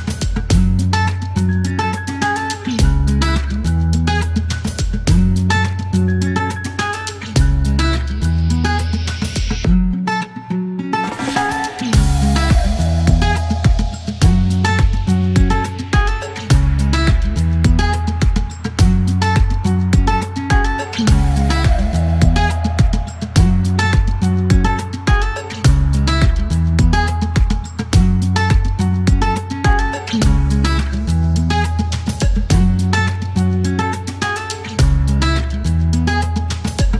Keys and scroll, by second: 2.2-6.4 typing, 7.9 space, 11.5 typing, 14.2 space, 15.8-16.4 typing, 18.1-19.6 typing, 20.7 m, 22.5 typing, 24.6 space, 27.1-28.0 typing, 33.5 k, 33.5 l, 33.9 space, 36.4-36.9 typing.